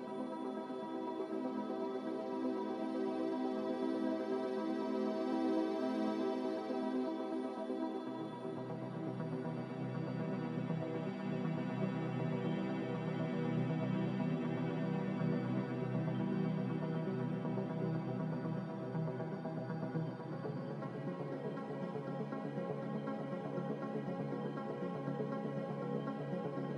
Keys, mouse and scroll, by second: 1.2 c, 4.9 click, 11.7 click, 12.7 z, 15.3-16.1 typing, 18.5 typing, 18.8 Return.